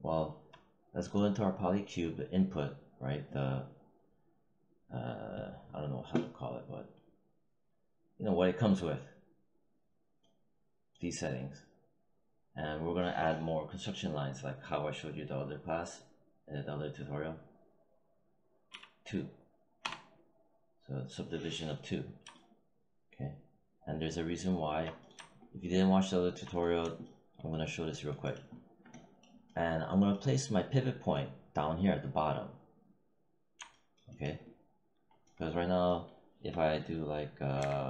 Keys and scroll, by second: 18.6 2, 19.7 Return, 37.5 e.